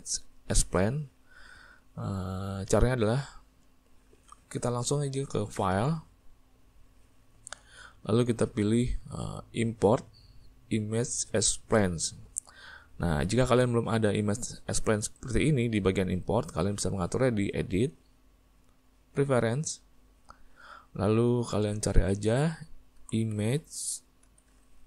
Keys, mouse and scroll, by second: 19.6 click.